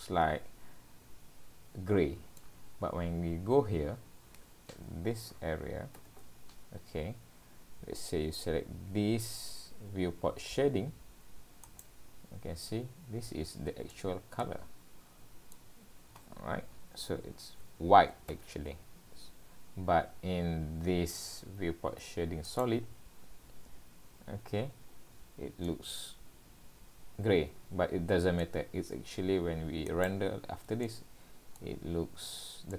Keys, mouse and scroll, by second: 14.4 scroll down 4, 15.8 scroll down 1, 22.5 click, 25.1-25.5 scroll up 3, 25.7 middle click, 29.9 click, 30.8 middle click, 31.8-32.5 scroll up 1, 32.5 scroll up 2.